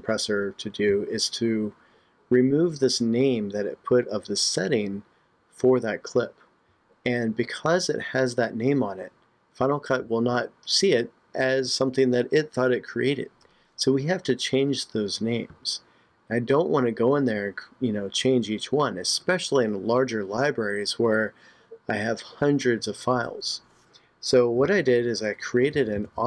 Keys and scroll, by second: 24.7 super+Tab.